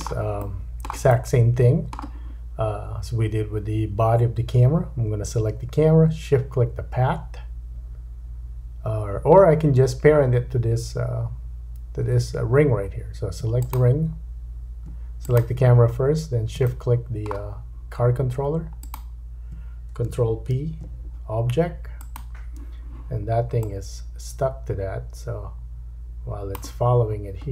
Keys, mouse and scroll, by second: 1.1 middle click, 4.2-13.4 middle drag, 13.4 shift+click, 15.2 click, 16.1-16.6 scroll up 2, 16.7 shift+middle click, 16.7 shift+scroll up 1, 18.8 shift+click, 20.1-27.5 ctrl+shift+drag, 20.5 ctrl+p, 27.0-27.5 scroll down 5.